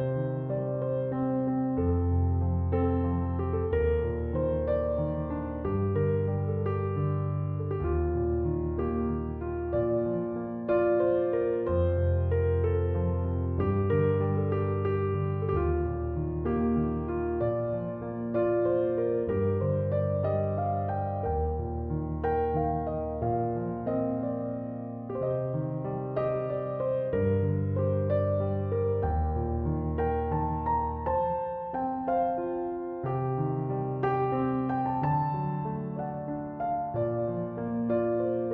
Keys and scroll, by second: 13.0 space, 30.7 space.